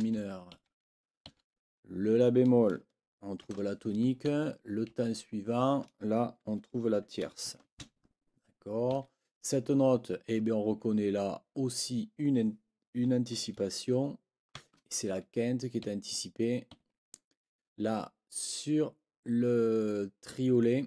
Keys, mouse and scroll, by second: 0.5 Right, 1.2 Right, 3.4 shift+t, 4.2 Right, 8.9 Right, 14.5 shift+(, 15.8 Right, 16.7 Right.